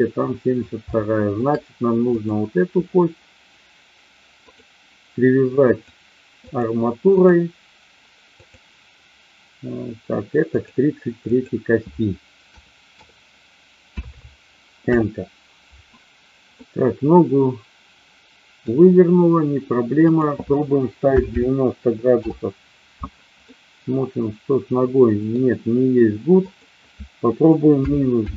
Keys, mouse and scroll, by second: 0.8-1.4 shift+middle drag, 2.0 click, 5.6-6.6 drag, 7.0-8.6 drag, 10.5-15.8 drag, 13.9 KP_3, 16.5-18.6 middle drag, 20.0-23.1 drag, 23.4-25.3 middle drag, 26.5-28.3 drag.